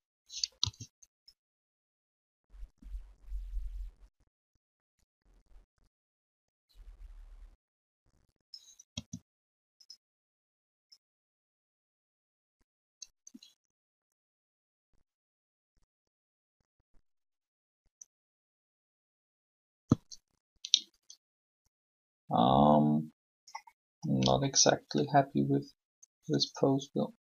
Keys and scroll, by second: 8.9 r.